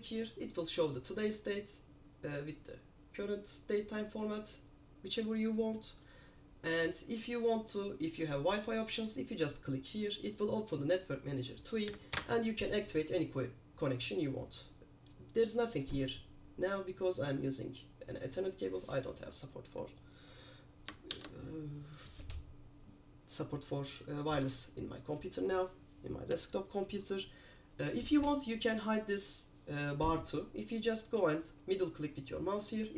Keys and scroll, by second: 12.0 Down, 12.2 Return, 21.3 super+q.